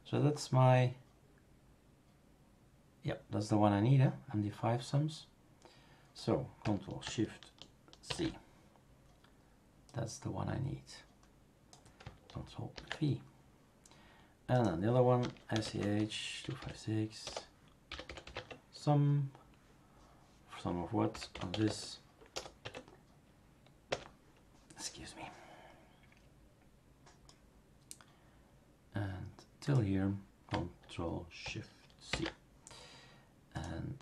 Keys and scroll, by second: 8.0 ctrl+shift+c, 12.8 ctrl+v, 15.0-18.7 typing, 21.1-22.3 typing, 22.6 Tab, 23.9 Return, 32.1 ctrl+shift+c.